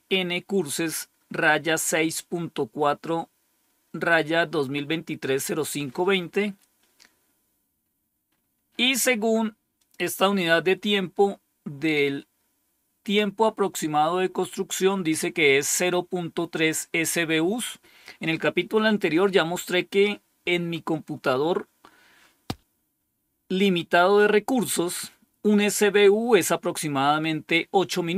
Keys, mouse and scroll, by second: 8.2-9.7 scroll up 1, 9.7 click.